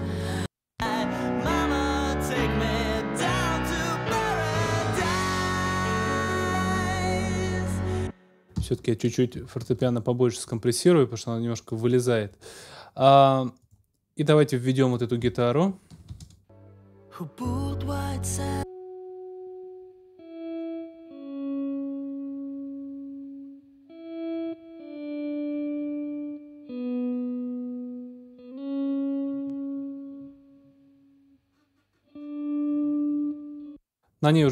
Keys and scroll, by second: 7.7 space, 8.5 super+space, 9.7 super+s, 16.1 ctrl+alt+space, 33.5 space.